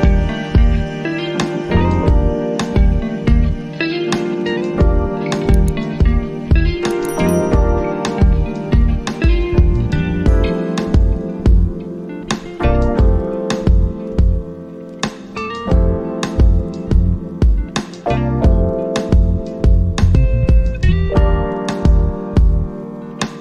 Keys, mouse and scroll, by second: 11.2-13.6 drag, 13.6-20.7 alt+drag, 22.7-23.4 drag.